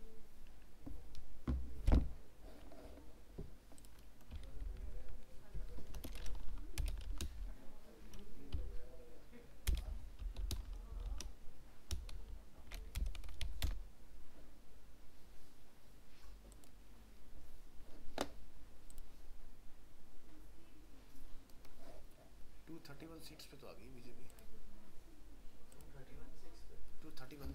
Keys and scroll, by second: 4.6 ctrl+shift+Left.